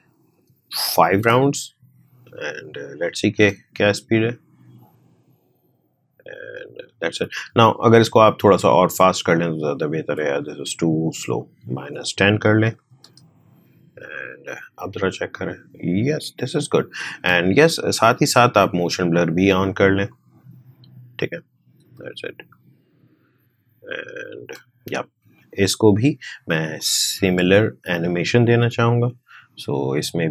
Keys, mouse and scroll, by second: 3.3 space, 7.4 space, 8.2-11.3 drag, 14.4 space, 17.1 space, 19.1 click, 21.8 space, 24.4 space, 25.6-28.6 drag, 28.6 r, 29.8-30.3 drag.